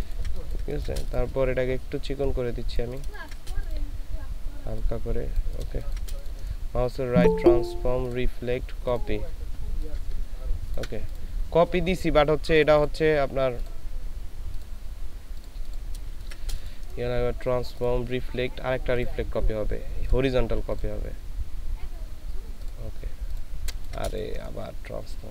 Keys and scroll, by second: 3.1 ctrl+space, 5.7 ctrl+space, 16.1 ctrl+space, 23.6 ctrl+space.